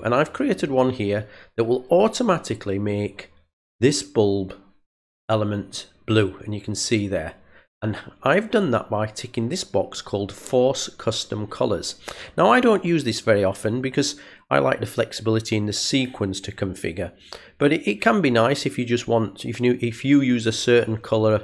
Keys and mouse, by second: 1.9 click, 5.6 click.